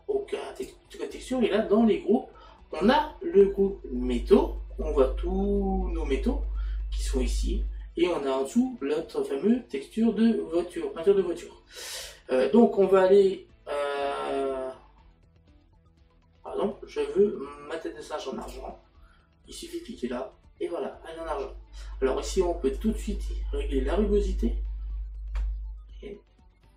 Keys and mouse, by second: 0.6 click, 18.5 click, 22.8 click.